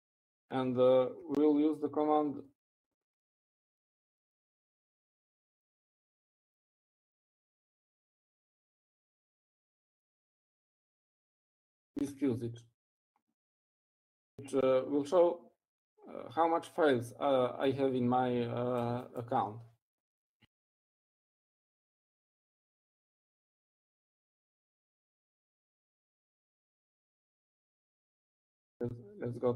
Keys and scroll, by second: 9.1 typing, 10.3-11.1 typing, 12.3-14.1 typing, 23.0-26.2 typing.